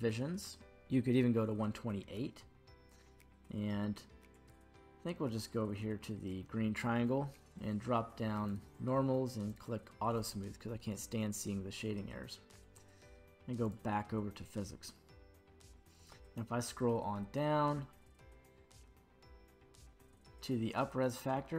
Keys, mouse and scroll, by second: 2.0-4.3 scroll down 1, 4.3 click, 4.3 scroll down 4, 7.3-8.5 scroll down 1, 8.5 click, 8.5 scroll down 1, 9.5 click, 10.5-12.5 scroll down 2, 13.6 click, 15.7-16.5 scroll down 1, 16.5 scroll down 6, 17.9-19.3 scroll up 1, 19.3 scroll down 1, 19.5-21.1 scroll down 1, 21.1-21.5 drag, 21.1-21.5 scroll down 4.